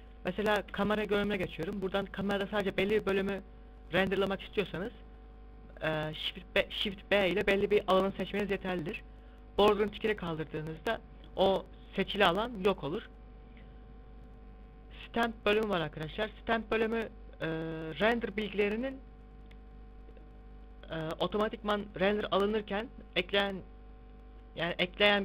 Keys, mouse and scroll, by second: 0.4 KP_0, 2.0 shift+b, 9.9 click, 12.1 middle click, 14.1 click.